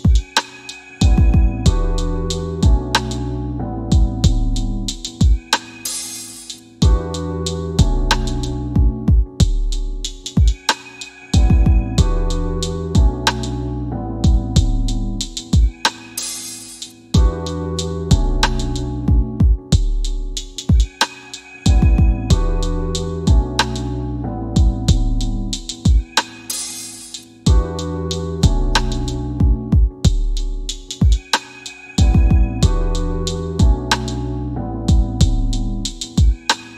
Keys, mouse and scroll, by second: 0.0-0.6 typing, 3.1 click, 6.0 typing, 19.1 click.